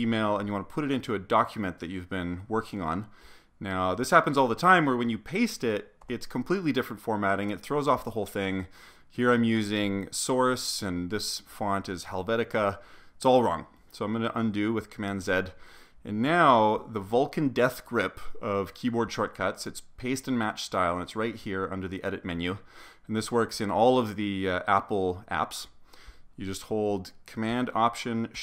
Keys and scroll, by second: 6.0 super+v, 15.1 super+z.